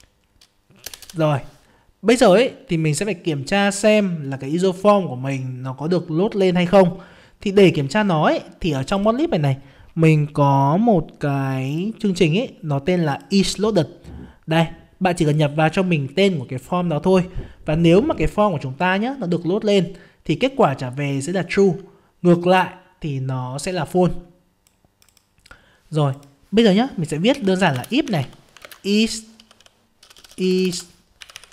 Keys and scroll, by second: 28.6 ctrl+space.